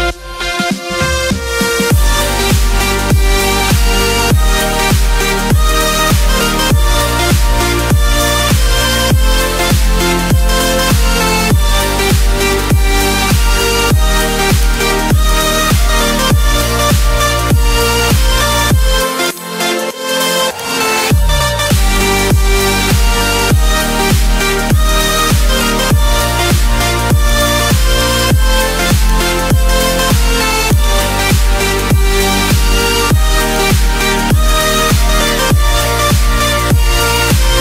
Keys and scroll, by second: 11.5 ctrl+t, 16.6 Return.